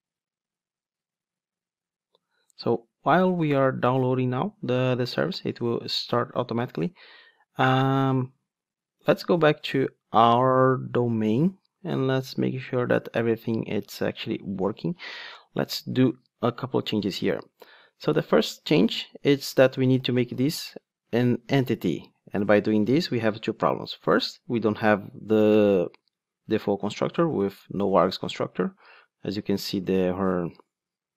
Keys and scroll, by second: 21.1 Return.